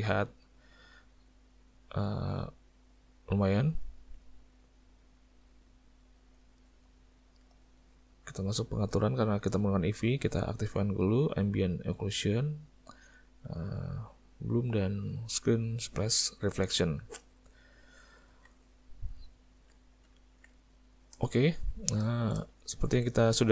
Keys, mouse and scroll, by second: 1.5 middle click, 2.1 ctrl+middle click, 2.7 middle click, 4.2 click, 4.4 middle click, 5.6 click, 6.7 middle click, 7.8 click, 12.2 click, 13.0 click, 14.3 click, 17.0 click, 17.7 middle click, 18.3 alt+a, 18.8 middle click, 19.4 ctrl+middle click, 20.1 middle click, 20.6 shift+middle click, 21.3 ctrl+middle click, 21.8 ctrl+middle click, 22.1 shift+middle click, 22.9 ctrl+middle click.